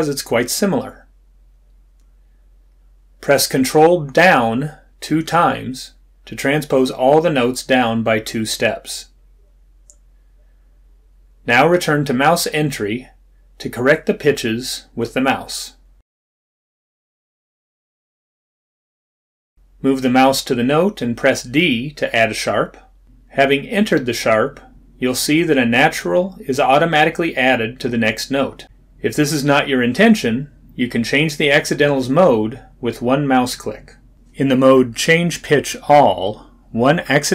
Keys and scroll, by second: 23.1 d.